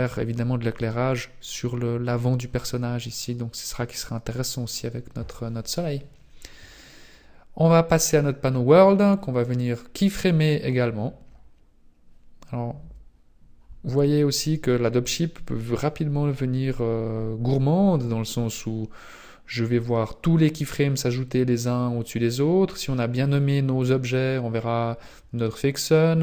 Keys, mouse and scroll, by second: 3.1-4.5 scroll down 4, 4.7 scroll up 1, 8.0 click, 9.3-9.6 scroll down 2, 15.0 click.